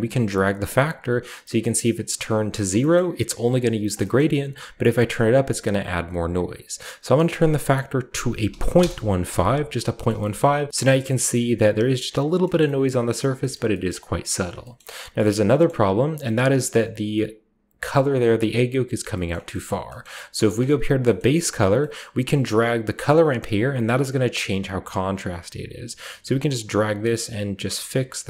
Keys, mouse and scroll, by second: 0.0-2.5 drag, 2.8 scroll up 1, 2.9 scroll down 2, 4.1 scroll up 2, 4.1-4.7 middle drag, 4.7-6.0 drag, 7.1 click, 8.3-9.7 drag, 8.3-8.6 typing, 8.7 Return, 10.0 shift+middle drag, 10.3-10.7 shift+middle drag, 10.4-10.7 shift+scroll up 1, 12.2-12.6 scroll down 1, 12.5 shift+middle click, 12.6 shift+scroll up 1, 12.8-13.3 shift+middle drag, 13.1 shift+scroll down 1, 13.5 shift+middle click, 13.8 shift+middle click, 14.4-15.7 shift+scroll down 1, 14.7-15.2 shift+middle drag, 15.6-17.8 middle drag, 15.7-17.8 scroll up 1, 19.2 middle drag, 19.6 middle drag, 19.8-22.4 scroll up 1, 20.0-20.5 middle drag, 20.4-21.7 drag, 22.4-23.2 drag, 23.6-24.6 drag, 25.0 click, 26.5 click, 27.6 click.